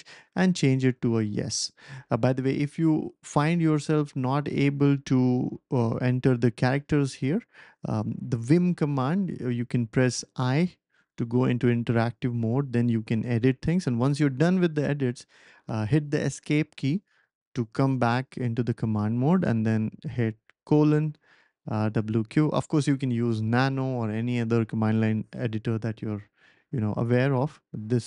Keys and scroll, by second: 0.0-1.4 typing, 1.9 Escape, 3.7 Page_Down, 4.1-4.8 typing, 20.0 shift+;, 21.5-22.4 typing.